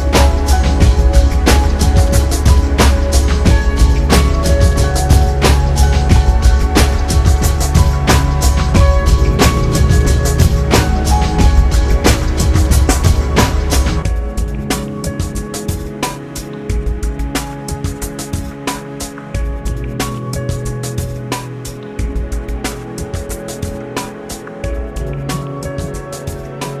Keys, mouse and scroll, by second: 2.1 F9, 6.4 F9, 7.9 Tab, 10.4 scroll up 2, 16.3 ctrl+alt+shift+m, 20.0 ctrl+KP_Add, 20.8 ctrl+KP_Add, 21.9 ctrl+KP_Add, 23.2 ctrl+KP_Add, 26.4 ctrl+KP_Add.